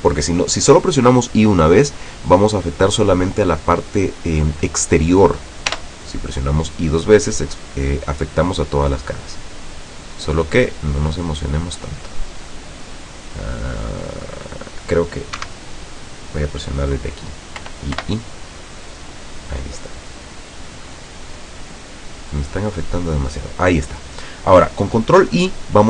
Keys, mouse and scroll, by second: 5.8 i, 15.5 Escape, 17.8 i, 23.4 click.